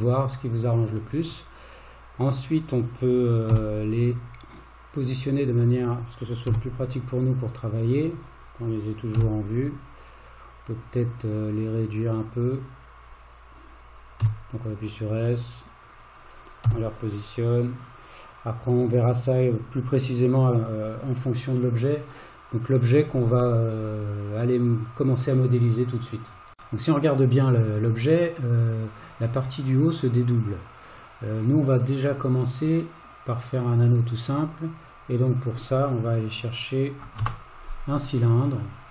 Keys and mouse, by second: 2.2 click, 3.6 g, 6.5 g, 9.2 g, 11.6-12.3 drag, 14.3 s, 16.7 g, 37.2 shift+a.